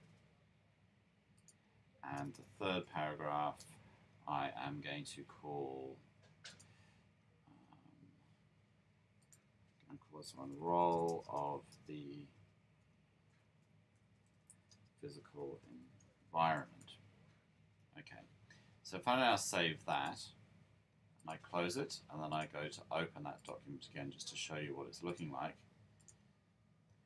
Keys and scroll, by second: 2.6 Up, 3.3 Up, 10.0-11.5 typing, 12.7-16.9 typing, 18.9 typing.